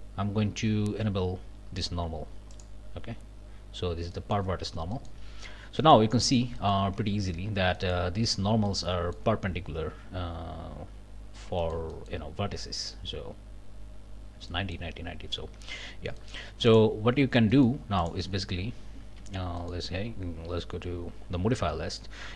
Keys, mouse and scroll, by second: 2.5 click, 4.1 middle click, 4.5-5.6 scroll up 3, 4.9 middle click, 5.8 middle click, 6.3 Tab, 6.6 middle click, 7.0 Tab, 7.8 click, 8.7 click, 11.2 scroll down 3, 11.6 shift+click, 12.2 shift+scroll up 2, 12.7 click, 14.5 click, 15.8 Tab, 16.2 click, 16.7 click, 17.5 click, 18.0 click, 18.9 z, 19.6 click.